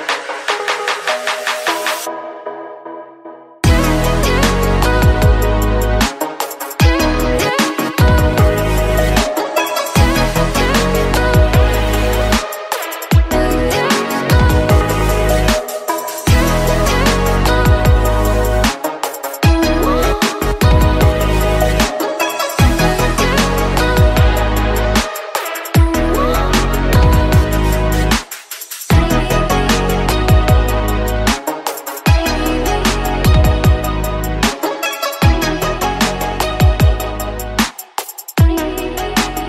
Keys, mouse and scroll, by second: 2.3 click, 4.6-6.3 middle drag, 6.3 Tab, 6.6 click, 6.9-7.3 scroll down 2, 7.3-8.6 middle drag, 8.6 click, 9.0 Tab, 9.1-10.3 scroll up 5, 10.3 ctrl+r, 12.6 ctrl+r, 14.2 Tab, 14.5 click, 14.8 middle click, 15.6 click, 15.8 Tab, 16.2 middle click, 16.9 click, 17.2 shift+click, 17.8 shift+click, 18.5 shift+click, 19.0 click, 20.2 click, 21.4 Tab, 21.7 click, 22.2 scroll down 3, 22.4-22.9 middle drag, 22.9 click, 23.2 Tab, 23.5 scroll up 2, 23.7 middle click, 24.4 click, 26.2 Tab, 26.6 click, 27.0 Tab, 27.6 click, 28.2 click, 29.4 Tab, 29.7 click, 30.0-31.1 middle drag, 31.1 click, 31.4 Tab, 31.8 middle click, 32.3 z, 33.1 click, 34.0 z, 34.8 click, 37.3-38.4 middle drag, 38.4 click.